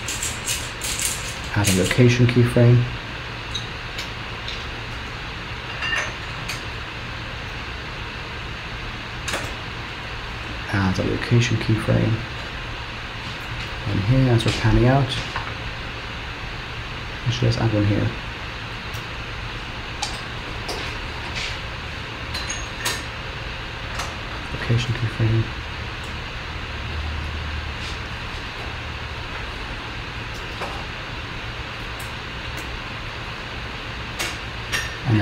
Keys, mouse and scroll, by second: 2.4 click, 4.7 g, 7.4 g, 9.5 i, 11.9 click, 18.8 g, 23.1 i, 25.0-25.5 Right, 25.9 Right, 26.4 Right, 26.6 Right, 26.8 Right, 26.9 Right, 27.1 Right, 27.3 Right, 27.5 Right, 27.7 Right, 27.9 Right, 28.1 Right, 28.3 Right, 28.4 Right, 28.7 Right, 28.9 Right, 29.0 Right, 29.2 Right, 29.4 Right, 29.6 Right, 29.8 Right, 30.2 g, 32.7 i.